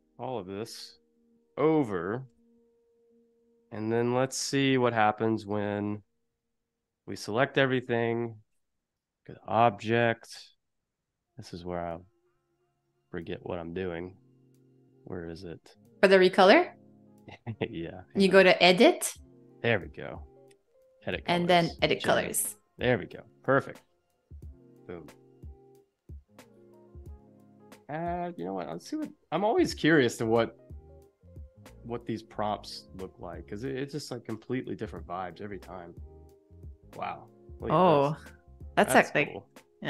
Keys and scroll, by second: 1.4 space, 2.3 v, 3.0 super+=, 3.4 space.